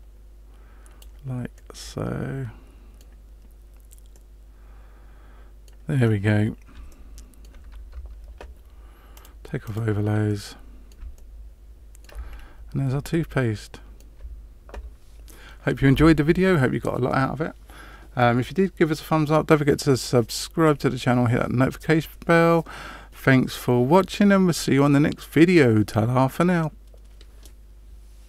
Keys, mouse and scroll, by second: 1.5 middle click, 4.1 middle click, 6.1-6.4 scroll down 2, 6.8 shift+middle click, 7.9 Tab, 9.1 click, 9.6 click, 10.2 middle click, 11.1 shift+middle click, 12.3-12.6 scroll down 2, 13.0 shift+middle click.